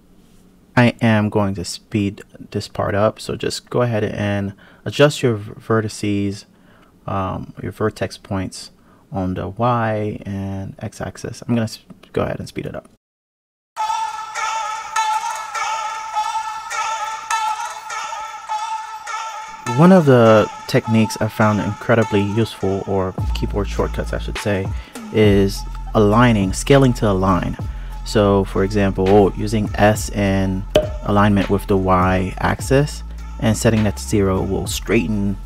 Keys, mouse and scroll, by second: 0.6 click, 1.5 g, 4.2 g, 6.7 g, 8.2 click, 9.1 g, 10.5 g, 12.2-14.8 typing, 13.4 click, 13.7 click, 14.5 click, 15.0 click, 15.2 click, 15.3 shift+click, 15.4 click, 15.8 KP_3, 15.9 click, 16.0 click, 16.2 g, 16.8 Tab, 16.9 click, 17.1 Tab, 17.4 click, 17.5 ctrl+shift+click, 17.7 scroll down 1, 18.0 KP_Decimal, 18.5-18.9 scroll down 2, 19.9 s, 23.4 click, 24.1 click, 25.0 g, 26.5-27.2 scroll down 3, 27.2 click, 27.7 g, 29.6 g, 30.8 g, 33.9 ctrl+r.